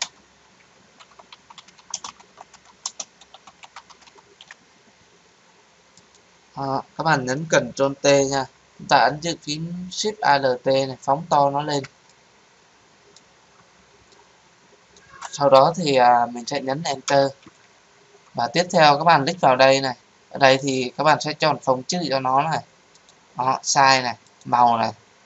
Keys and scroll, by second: 0.0 Return, 7.8 ctrl+t, 17.0 Return.